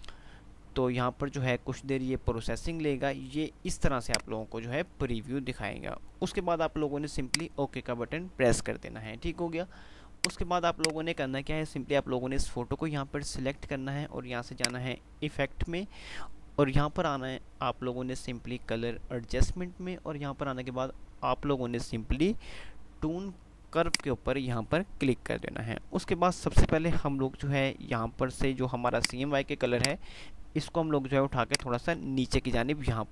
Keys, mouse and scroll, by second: 4.2 click, 7.2 click, 10.2 click, 14.7 click, 23.9 click, 29.1-33.1 drag.